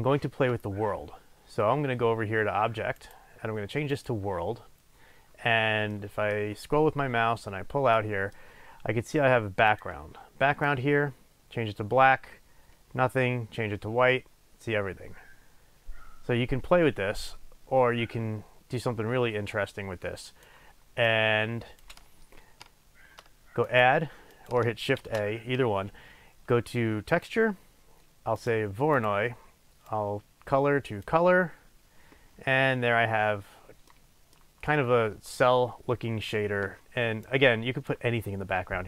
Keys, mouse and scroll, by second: 5.4-6.0 scroll down 2, 6.0-9.8 middle drag, 6.7 scroll down 2, 7.0-8.0 scroll up 2, 9.8 click, 21.1 click, 23.8 click, 25.3 shift+a, 29.1 click, 30.0 click, 34.0-37.3 middle drag, 37.3 click.